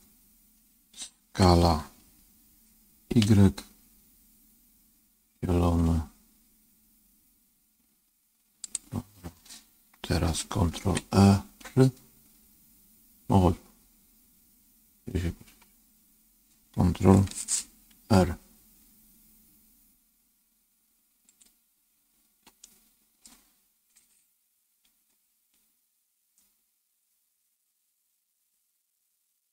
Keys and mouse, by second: 1.2 s, 10.7 ctrl+r, 17.8 ctrl+r, 21.2 click, 22.6 middle click, 24.7 ctrl+r.